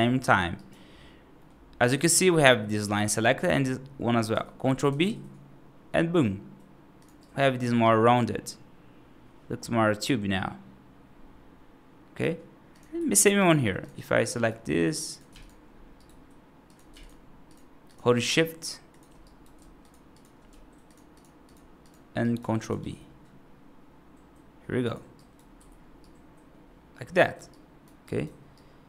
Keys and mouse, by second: 0.4 right click, 1.2 middle click, 4.8 ctrl+b, 7.1 right click, 7.5 F2, 7.7-12.1 right drag, 12.8 F3, 13.0 right click, 13.6 click, 13.8 click, 14.2 right click, 15.0 click, 15.8 right click, 19.1 right click, 21.7 shift+click, 22.1 right click, 22.6 ctrl+b, 25.0 right click, 25.4 F2, 25.9-27.2 right drag, 27.4-27.7 right drag, 27.9 right drag, 28.4-28.8 right drag.